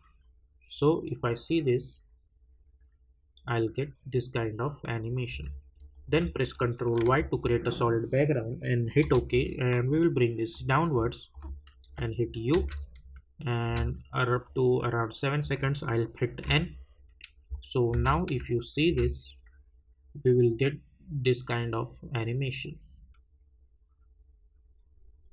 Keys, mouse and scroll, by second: 5.3 space, 5.9 click, 10.5 click, 11.9 u, 14.4 click, 16.4 n, 20.1 space.